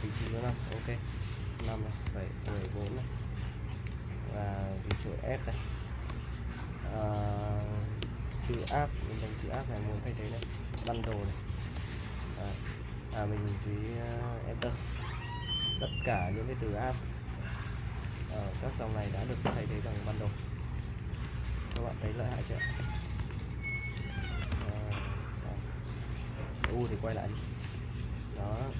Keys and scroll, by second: 0.5-3.2 typing, 4.9 s, 6.1 /, 8.1-12.2 typing, 14.6 Return, 17.8-25.1 typing, 26.6-28.7 typing.